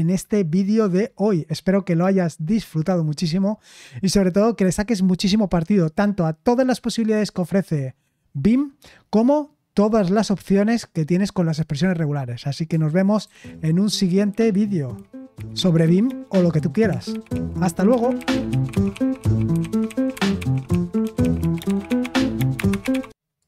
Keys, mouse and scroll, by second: 13.2 super+x, 23.4 click.